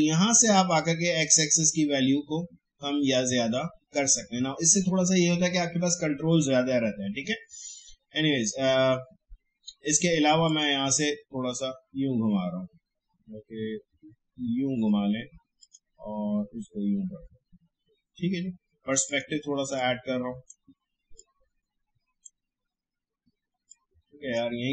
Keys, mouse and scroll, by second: 0.5 click, 1.0-2.8 scroll up 1, 6.1 scroll down 1, 10.4 click, 10.8-12.9 scroll up 1, 15.2-15.6 scroll down 1, 15.6 click, 16.0 scroll up 1, 19.0-24.7 drag.